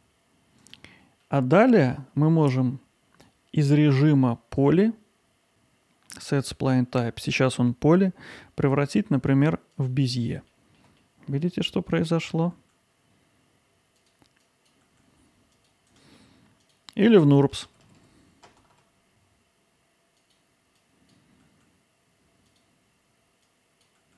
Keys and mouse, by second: 1.2 middle click, 2.6-4.6 drag, 4.6-10.5 right drag, 10.5 alt+middle click, 11.4 ctrl+alt+middle click, 11.7 click, 12.5 g, 14.0 click, 14.8 g, 16.0 right click, 16.7 click, 17.1 ctrl+z, 17.3 ctrl+z, 17.7 ctrl+z, 19.1 right click, 19.9 click, 20.1 g, 20.9 click, 21.1 g, 21.5 middle click, 21.8 click, 22.0 g, 22.4 middle click, 22.6 click, 22.8 g, 23.5 Tab.